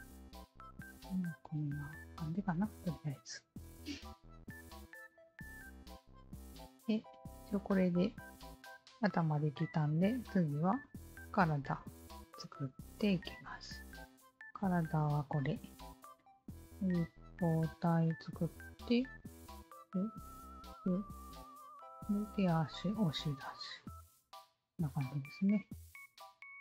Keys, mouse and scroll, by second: 0.2 alt+click, 0.9-2.9 alt+drag, 4.6 alt+click, 5.2 alt+click, 5.6-10.3 alt+drag, 11.9 alt+click, 13.0 alt+click, 14.2 alt+click.